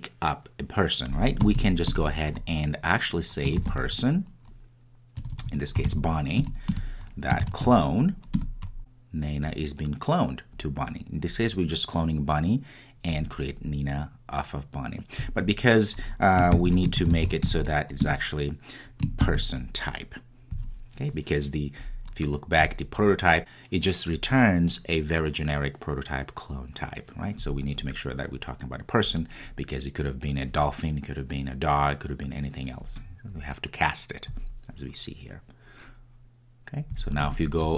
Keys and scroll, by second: 6.4 Return, 18.1 Return.